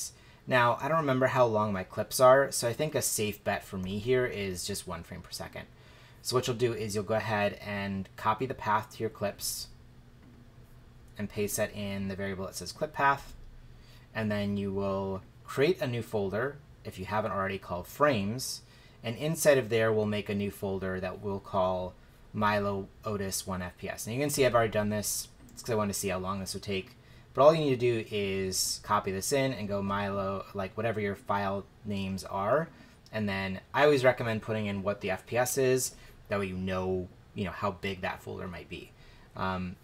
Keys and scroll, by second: 2.8 BackSpace, 3.8 1, 13.2 super+v, 28.5 super+v.